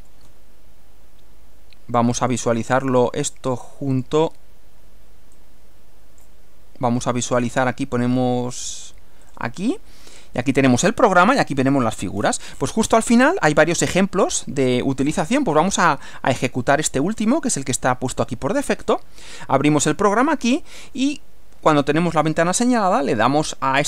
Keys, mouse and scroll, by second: 2.2 click, 4.0 click, 5.4 click, 7.4 click, 9.3 click, 12.2-12.8 scroll down 2, 13.2 scroll down 2, 17.2-17.5 scroll down 2, 18.6-19.0 scroll up 1, 22.4 click.